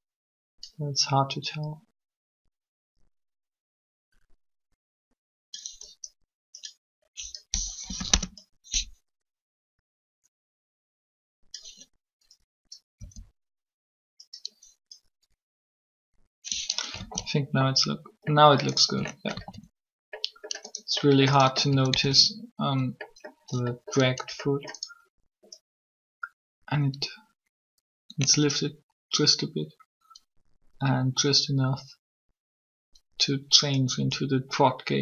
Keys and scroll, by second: 7.7 Delete, 7.9 Return, 13.0 r, 17.0 alt+a, 19.3 alt+a, 21.9 alt+a.